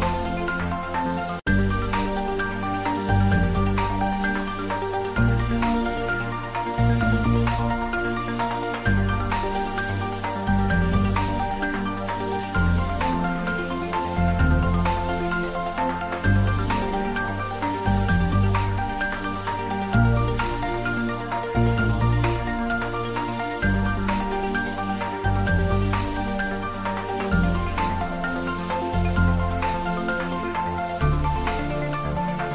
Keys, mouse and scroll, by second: 0.0 shift+z, 0.6 shift+right click, 1.3 click, 2.8 shift+right click, 3.5-4.9 middle drag, 4.9 click, 5.2 shift+z, 5.9 shift+right click, 6.6 click, 7.2 shift+a, 8.3 click, 8.5 ctrl+middle click, 9.4 shift+a, 10.7 click, 12.3 s, 13.5 click, 15.8 r, 17.2 y, 18.3 click, 19.3 shift+z, 19.6 Tab, 20.6 2, 21.8-22.5 typing, 22.1-23.6 drag, 23.6 click, 24.5 click, 25.5-27.0 drag, 27.1 x, 27.9 click, 28.4 Tab, 29.1 s, 31.1 click, 31.4-32.5 ctrl+middle drag.